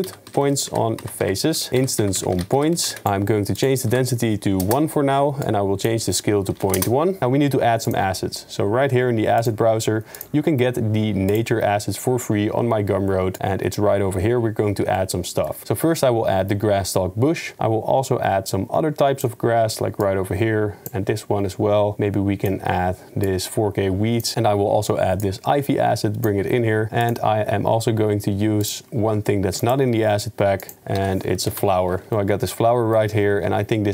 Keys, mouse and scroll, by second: 10.2-11.0 drag, 15.1-15.5 shift+middle drag, 18.5 right click, 24.3 ctrl+z, 27.1 click, 28.7-29.7 drag, 30.6 click, 32.1 s, 32.3-32.7 drag, 32.7 middle click.